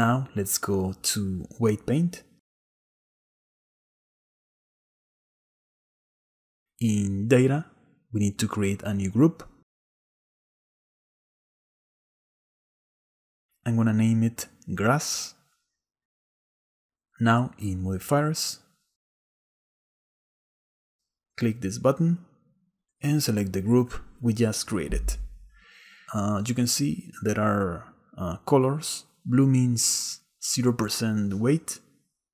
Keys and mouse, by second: 2.5-3.8 drag, 5.0 shift+middle click, 8.3 click, 12.6 click, 14.3-15.7 drag, 15.4 s, 22.6 click, 24.5-26.9 drag, 28.8 middle click, 31.0 middle click.